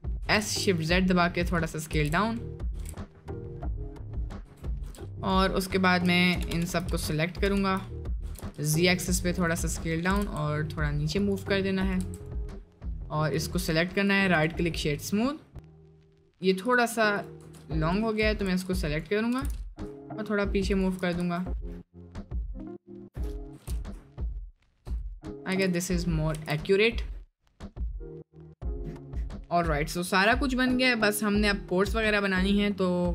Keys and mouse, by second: 0.2 s, 1.9 s, 2.8 s, 4.4 Tab, 6.3 ctrl+KP_Add, 8.2 s, 9.7 middle click, 10.0 g, 11.9 click, 12.0 Tab, 12.2-13.0 drag, 13.6-14.1 drag, 14.7 middle drag, 15.1-15.5 middle drag, 15.9-17.3 drag, 17.4 Tab, 17.7 click, 18.5 1, 18.8 click, 19.3 g, 21.2 Tab, 22.8 click, 23.6 g, 25.5 Tab, 26.0 middle click, 26.4 ctrl+s, 26.5 middle click, 27.1 middle drag, 27.7-28.2 middle drag.